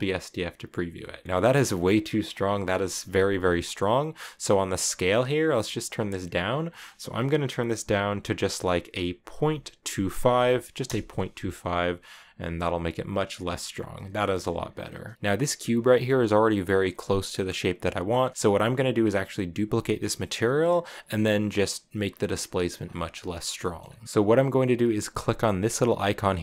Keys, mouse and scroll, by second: 0.0-0.6 scroll down 2, 0.7-1.2 shift+middle drag, 1.2 scroll up 2, 2.3 middle click, 2.5 scroll up 2, 2.5 scroll down 1, 2.8-6.0 scroll up 6, 6.0-9.2 drag, 11.9 click, 13.0-13.8 scroll down 1, 13.8 scroll down 1, 13.9-14.4 shift+middle drag, 14.4-15.1 scroll down 1, 15.1-16.6 shift+middle drag, 18.3-20.9 shift+middle drag, 22.5 scroll down 1, 22.6 scroll up 1, 22.6 scroll down 1, 22.6-23.2 scroll up 1, 23.2-23.8 scroll down 4, 23.4 middle click, 23.8-26.3 middle drag.